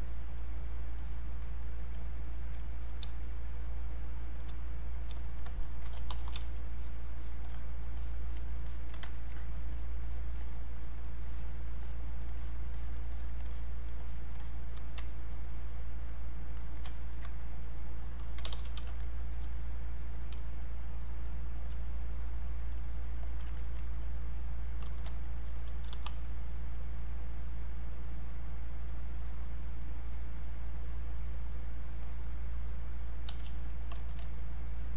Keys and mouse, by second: 3.1 space, 3.5 click, 3.6 space, 5.2 alt+click, 5.6-6.4 typing, 6.7 alt+click, 12.4 alt+click, 16.6 alt+click, 17.0 ctrl+right click, 18.0 click, 18.2-19.3 typing, 19.2 click, 19.7 click, 20.4 space, 20.8 click, 20.9 space, 21.8-23.6 drag, 23.6 alt+click, 25.3 alt+click, 25.9 r, 26.3-33.3 drag, 33.3 q, 33.7 click, 34.7 click.